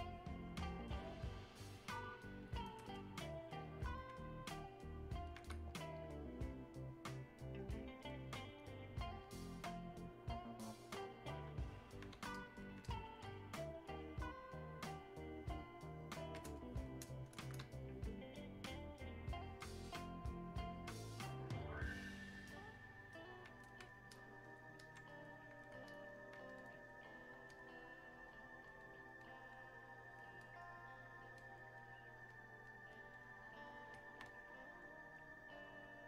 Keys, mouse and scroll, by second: 3.0-4.6 shift+drag, 4.6-12.4 alt+drag, 14.0-16.6 alt+drag, 16.6 shift+click, 17.9-19.4 alt+drag, 19.4-25.9 alt+drag, 26.5 click, 34.3-36.0 alt+drag.